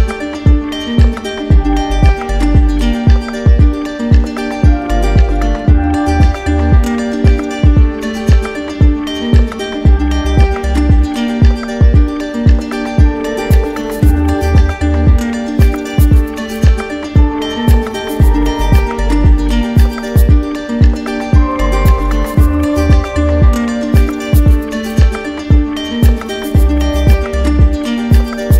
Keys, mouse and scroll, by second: 0.3 right click, 1.7 click, 3.7 click, 5.5 click, 6.3 right click, 7.3 click, 8.5 click, 9.3 right click, 10.7 alt+click, 12.2 click, 12.9 click, 13.8 click, 14.7 click, 15.6 alt+click, 16.4 alt+click, 18.6 click, 19.5 alt+click, 20.5 click, 21.5 click, 22.2 click, 23.0 click, 23.6 click, 24.9 click, 26.0 click, 28.4 click.